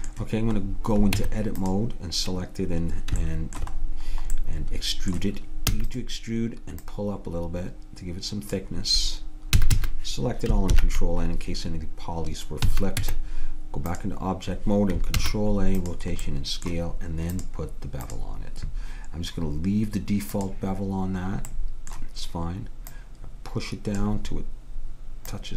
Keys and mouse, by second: 1.3 Tab, 3.4-5.1 middle drag, 5.8 e, 6.9-8.8 drag, 9.7 a, 9.8 a, 10.8 ctrl+n, 12.7 a, 13.1 Tab, 15.3 ctrl+a, 17.4 click, 18.7 click, 20.4-22.2 drag, 21.7 right click, 21.7-24.1 middle drag, 22.9-24.7 drag, 25.3-25.5 drag.